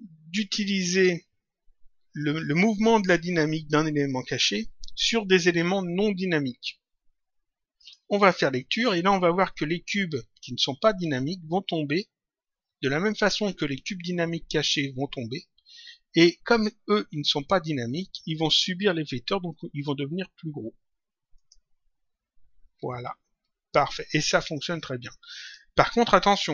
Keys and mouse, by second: 7.7 click, 21.3 click, 25.3 click.